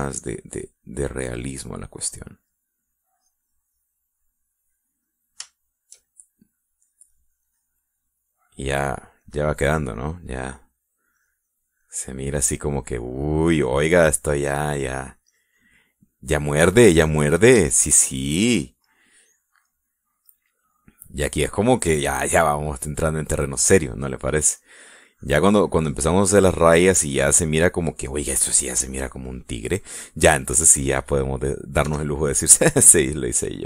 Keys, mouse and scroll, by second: 2.1-3.5 drag, 3.6 middle click, 4.2 click, 5.3-6.4 middle drag, 6.6 shift+middle click, 7.9-9.6 drag, 10.3-11.6 drag, 11.6 middle click, 12.2-13.4 drag, 14.3 middle click, 15.1 click, 15.8 middle click, 16.3-17.9 drag, 18.0 click, 18.7 shift+middle click, 19.3 shift+middle click, 19.9 shift+middle click, 20.7 middle click, 21.3 middle click, 23.8-25.3 drag, 25.8-27.7 drag, 29.7-31.6 drag, 32.9 f, 33.5 click.